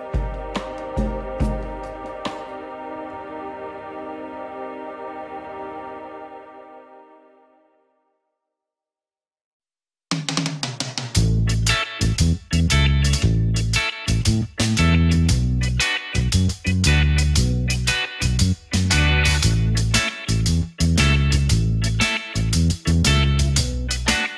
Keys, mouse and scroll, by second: 0.2 e, 7.0 e, 10.3-10.6 scroll down 1, 11.1 click, 12.9 click, 14.0 click, 15.0 KP_1, 16.1 ctrl+KP_1, 17.6 ctrl+KP_3, 19.3 click, 21.4 ctrl+z, 21.9 e.